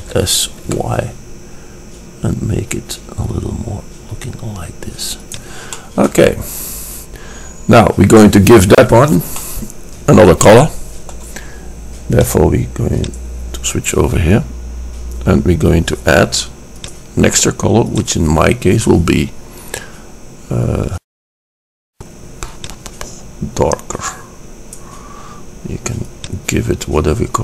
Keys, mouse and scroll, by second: 0.2 s, 0.3 click, 6.2 middle click, 7.8-9.5 middle drag, 9.8 middle click, 10.2 click, 10.4 middle click, 13.4 click, 17.0-20.0 drag, 22.1-23.0 drag.